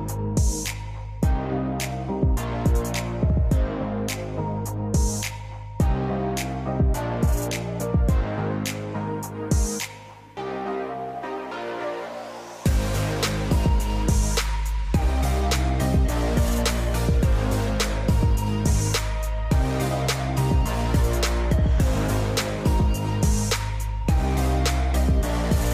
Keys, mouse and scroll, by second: 3.9-6.1 drag, 6.7-8.1 drag, 8.1 scroll up 5, 8.3 scroll down 1, 8.4 scroll up 1, 8.7 scroll down 3, 9.3 scroll down 1, 9.9 click, 12.6 n, 16.6 click, 19.3-21.2 drag, 21.2 scroll up 2, 21.5 scroll down 2, 23.6 scroll.